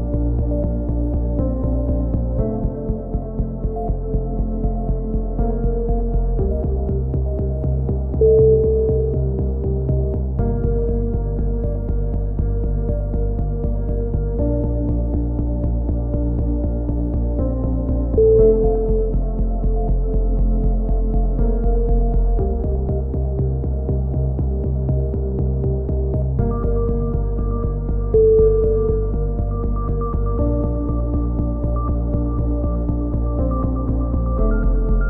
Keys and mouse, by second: 1.6-2.2 drag, 2.5-3.9 drag, 3.9 ctrl+z, 5.4 KP_3, 6.3 ctrl+z, 6.9 c, 7.9 right click, 7.9 h, 8.3-9.0 drag, 9.0 z, 10.1-11.3 right drag, 10.5 ctrl+l, 11.3 ctrl+z, 11.9 shift+d, 13.0-19.1 drag, 19.1 a, 20.5 click, 21.2 a, 21.2 w, 22.5 ctrl+n, 22.8 a, 23.3 Tab, 27.1 click, 29.4 Tab.